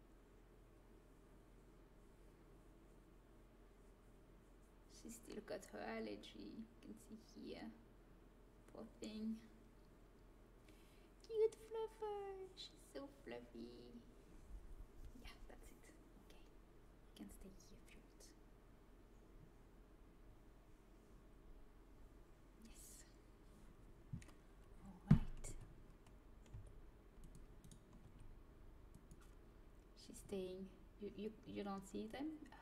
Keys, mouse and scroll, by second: 25.4 a, 26.4 c, 28.0 g.